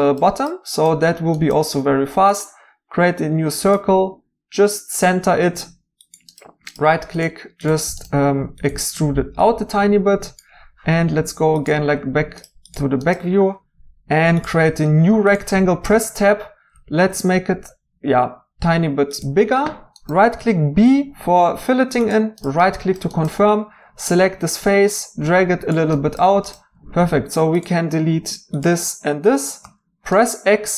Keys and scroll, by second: 8.2 Tab, 15.9 Tab, 20.3 b, 29.6 x.